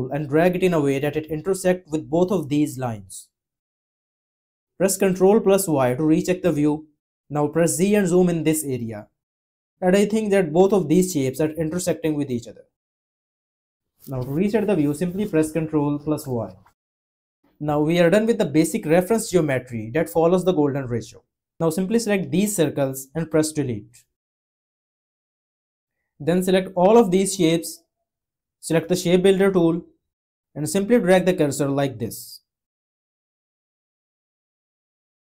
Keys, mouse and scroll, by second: 5.2 ctrl+y, 7.6 z.